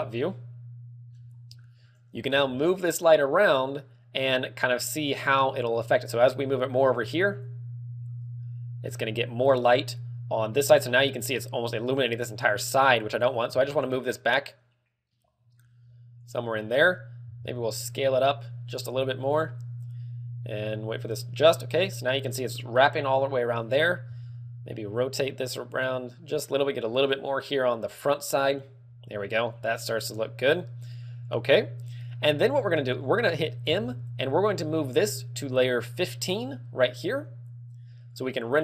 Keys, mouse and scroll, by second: 0.4 shift+middle click, 3.7 g, 8.3 click, 14.9 g, 16.8 click, 18.3 s, 19.4 click, 25.3 r, 26.9 click, 33.7-34.3 scroll down 3, 34.3 m.